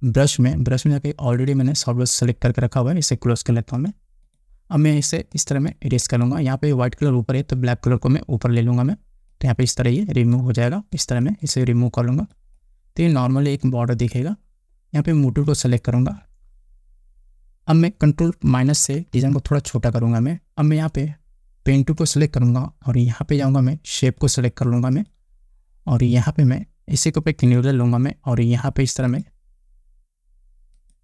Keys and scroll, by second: 19.7 ctrl+-.